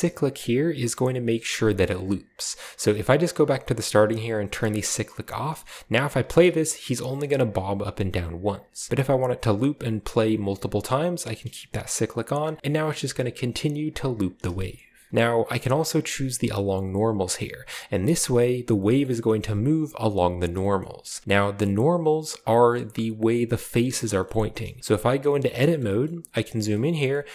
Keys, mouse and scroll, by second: 0.2 click, 2.9-3.2 drag, 5.0 click, 5.4 middle click, 5.8 click, 6.0 space, 7.0 click, 7.8 click, 8.6 space, 11.2 click, 11.7 click, 12.4 space, 12.6 middle drag, 14.6 shift+middle click, 15.1 space, 18.1 click, 19.0-20.5 middle drag, 20.8-22.4 shift+scroll up 1, 22.7-24.0 middle drag, 24.2 shift+middle drag, 24.5 middle click, 24.9 Tab, 25.8 shift+middle click, 26.0 middle click, 26.1-27.3 scroll up 1.